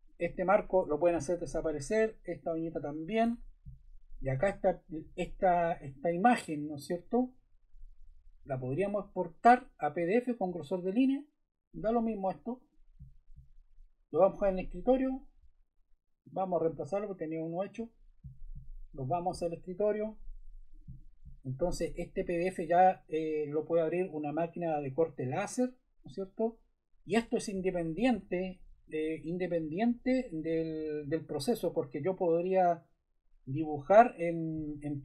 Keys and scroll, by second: 0.7 BackSpace, 3.2 BackSpace.